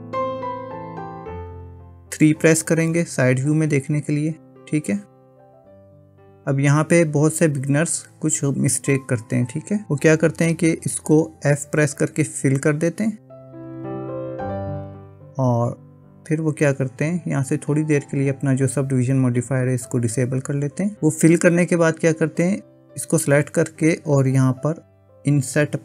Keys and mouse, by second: 0.0-1.6 middle drag, 3.0 KP_3, 13.7 f, 15.9 click, 19.9 click, 23.0 click, 25.3 i.